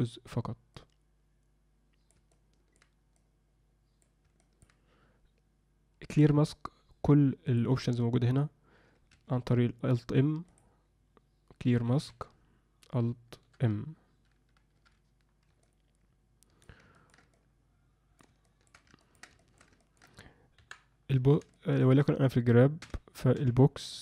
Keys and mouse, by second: 0.7-2.1 drag, 2.3 alt+middle click, 3.1 click, 4.4 alt+middle click, 7.5-9.3 drag, 10.6-12.1 drag, 14.8 alt+m, 15.6-16.6 alt+middle drag, 16.9 ctrl+middle click, 17.3 middle click, 18.4 shift+middle click, 19.1 ctrl+alt+middle click, 19.4 alt+shift+middle click, 19.8 ctrl+alt+middle click, 20.5 KP_1, 21.5 shift+middle click, 22.8 g.